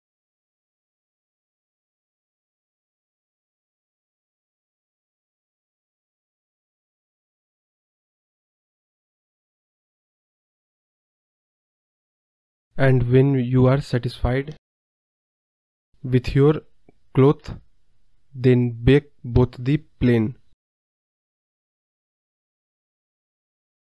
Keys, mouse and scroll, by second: 0.3 click, 0.7 KP_0, 0.7 KP_0, 2.0-4.1 drag, 4.1 BackSpace, 5.2 click, 6.5 scroll down 3, 6.7 click, 8.2-9.3 scroll down 31, 9.5-10.7 drag, 10.7-12.0 drag, 13.2 click, 13.4-14.2 scroll up 38, 14.2-16.7 drag, 16.7 scroll down 2, 17.0 click, 17.3 KP_0, 17.4 KP_0, 19.1 scroll down 3, 19.3 click, 20.7-21.9 scroll down 32, 21.9-23.0 drag, 23.0-23.6 scroll down 5, 23.6-23.8 scroll up 19.